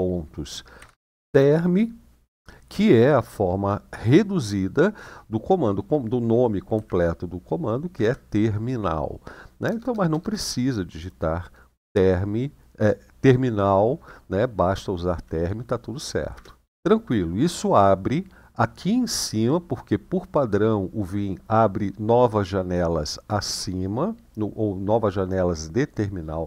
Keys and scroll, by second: 0.5-1.0 typing, 6.5 i, 7.7 Tab, 9.4 BackSpace, 9.6 BackSpace, 9.8 BackSpace, 16.1 Return.